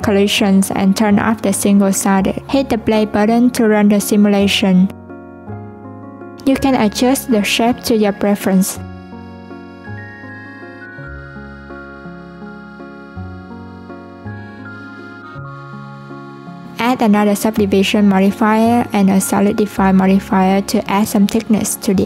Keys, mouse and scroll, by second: 2.6-7.4 drag, 7.9 s, 9.5-12.5 drag, 16.2 click, 17.0-17.6 drag, 20.0-21.5 drag.